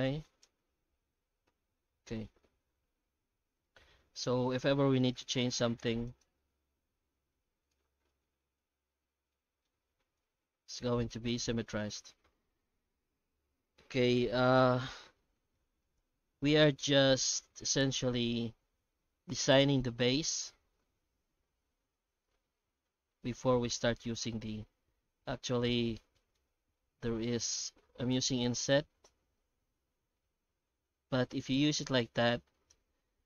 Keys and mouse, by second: 0.7 Tab, 1.5 alt+a, 1.9 Tab, 2.2 middle click, 2.6 alt+a, 3.2 Tab, 3.6 middle click, 4.7 2, 5.0 right click, 6.1 ctrl+right click, 6.7 ctrl+click, 6.8 ctrl+b, 7.8 Tab, 8.1-9.6 middle drag, 9.7 Tab, 10.2 ctrl+z, 10.3 ctrl+z, 10.5 ctrl+z, 11.2 a, 11.4 Tab, 11.7 middle drag, 12.0 alt+a, 13.3-14.4 middle drag, 15.3 shift+middle drag, 15.8 right click, 16.0 Tab, 16.6 alt+a, 16.9 shift+middle click, 17.6 ctrl+r, 19.7 3, 20.1 alt+shift+right click, 20.8 1, 23.6 Tab, 24.7 Tab, 25.1 ctrl+z, 25.2 ctrl+z, 25.4 ctrl+z, 26.1 shift+middle click, 26.7 middle click, 27.4 shift+middle click, 28.2 i, 32.7 shift+z, 33.1 shift+z.